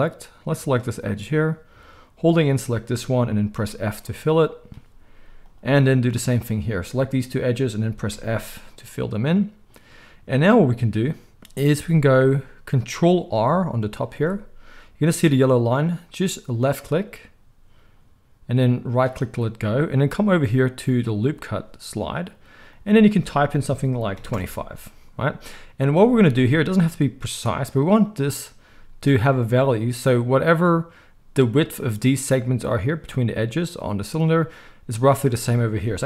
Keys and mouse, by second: 0.6-2.3 middle drag, 2.3 shift+click, 2.4-5.4 shift+middle drag, 3.5 f, 5.4 click, 5.5-7.1 middle drag, 7.1 shift+click, 7.2-21.1 shift+middle drag, 8.1 f, 14.1 ctrl+r, 21.1-36.0 drag.